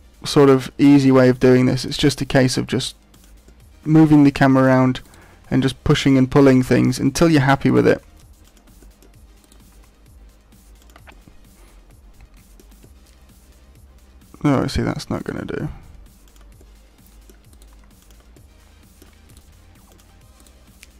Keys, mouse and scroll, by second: 0.8 right click, 1.2 middle click, 2.2 g, 3.2 click, 3.4 middle click, 5.0 right click, 5.4 g, 6.0 click, 6.3 middle click, 7.6 right click, 7.9 g, 8.5 click, 8.8 middle click, 9.4 right click, 9.7 g, 10.9 click, 11.1 middle click, 12.8 middle click, 15.1 right click, 15.5 g, 16.3 click, 16.5 middle click, 17.5 right click, 17.7 g, 18.1 click, 18.3 middle click, 19.2 right click, 19.5 g, 19.9 click, 20.3 right click.